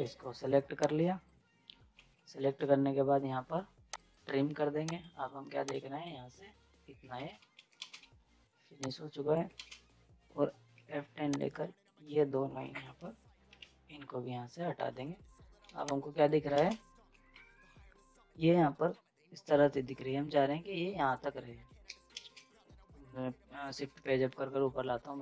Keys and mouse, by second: 1.9 ctrl+z, 3.9-7.1 drag, 7.1 ctrl+z, 7.6 right click, 7.8 space, 8.0 z, 8.9 click, 9.5 ctrl+space, 10.8 F10, 11.4-14.2 drag, 15.6 z, 15.9 click, 16.6 space, 17.1 F10, 22.0 F10, 24.0 space.